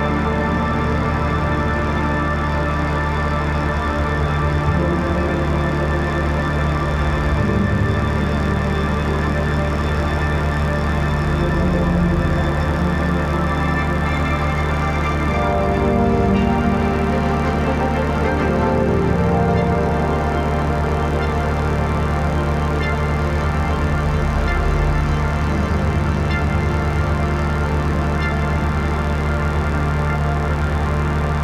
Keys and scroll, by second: 0.0-0.4 typing, 0.6 ctrl+z, 2.7 ctrl+s, 3.0 [, 4.2 space, 8.2 space, 12.3 ctrl+s, 19.1 ], 20.2 [, 20.9 ], 22.0 [, 22.8 ], 23.0 [, 23.7 ], 25.0 x, 28.9 x, 30.5 ctrl+z, 31.3 ].